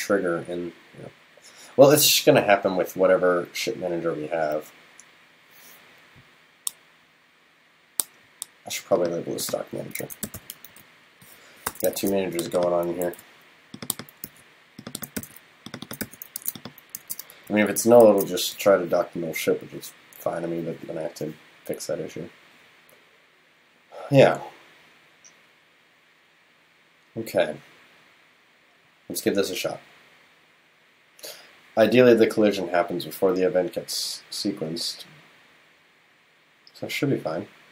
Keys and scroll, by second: 12.0 super+s, 13.1 super+c, 14.3 super+v, 15.2 super+v, 16.4 super+s, 17.0 super+s, 18.1 super+s.